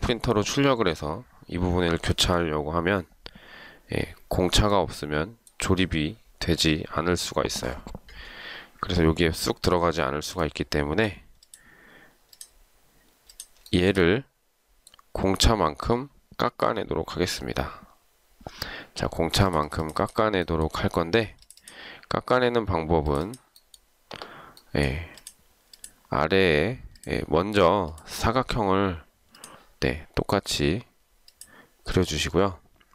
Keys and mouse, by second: 10.2 shift+right click, 13.9 shift+right click.